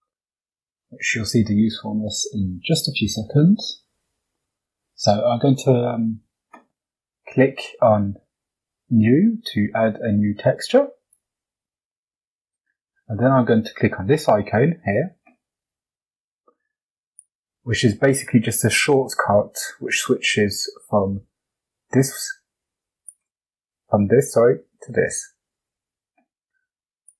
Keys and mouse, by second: 0.0-0.6 middle drag, 1.0 shift+middle drag, 3.6 shift+middle click, 10.6 click, 16.8 click, 22.9 click, 25.0 click, 26.9-27.1 drag.